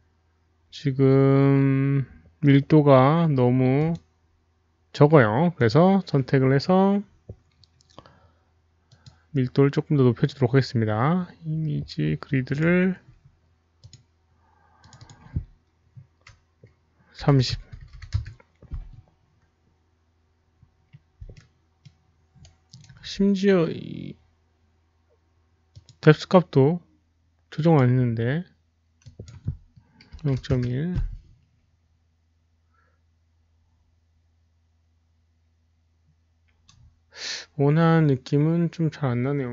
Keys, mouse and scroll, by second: 3.8 alt+click, 5.9 click, 8.8 click, 12.4 click, 14.7 click, 14.9 click, 17.3 click, 17.3 KP_0, 17.3 KP_3, 17.5 Tab, 17.7 Tab, 17.7 click, 17.7 KP_3, 17.7 KP_0, 18.0 Return, 19.8 middle click, 19.8 click, 21.4 Return, 21.4 Tab, 21.4 alt+middle click, 21.4 click, 21.4 KP_0, 21.4 KP_3, 21.8 Tab, 21.8 click, 21.8 KP_3, 22.5-23.2 alt+right drag, 24.4 Return, 24.4 Tab, 24.4 click, 24.4 KP_0, 24.4 KP_3, 25.7 Return, 25.7 Tab, 25.7 click, 25.7 alt+middle click, 25.7 KP_0, 25.7 KP_3, 26.1 Return, 26.1 Tab, 26.1 alt+right click, 26.1 alt+middle click, 26.1 KP_0, 26.1 KP_3, 27.4 Return, 27.4 click, 27.4 alt+right click, 27.4 alt+middle click, 29.1 Return, 29.2 click, 29.2 alt+right click, 29.2 alt+middle click, 30.5 Return, 30.5 click, 30.5 alt+right click, 30.5 alt+middle click, 30.5 KP_1, 30.5 KP_Decimal, 31.5 Return, 31.5 KP_1, 31.5 KP_Decimal, 33.4 Return, 33.4 click, 33.4 KP_1, 34.3 Return, 34.3 click, 34.3 KP_1, 37.7 Return, 37.7 middle click, 37.7 click, 37.7 KP_1, 37.7 KP_Decimal.